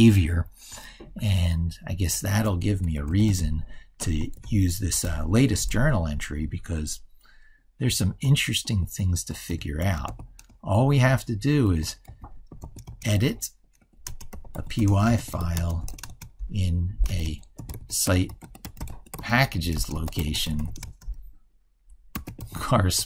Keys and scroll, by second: 1.0 ctrl+super+Left, 4.3 ctrl+f.